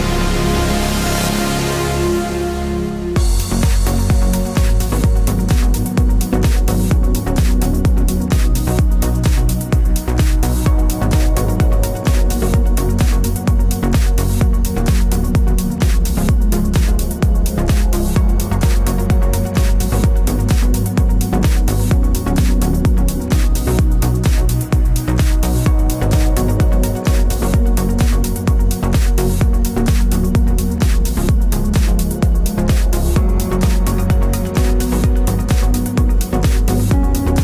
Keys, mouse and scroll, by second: 9.5 click, 12.9 click, 14.2 ctrl+alt+shift+e, 15.5 click, 17.5 Up, 18.8 Down, 24.0 Up, 29.9 alt+Num_Lock, 34.2 click.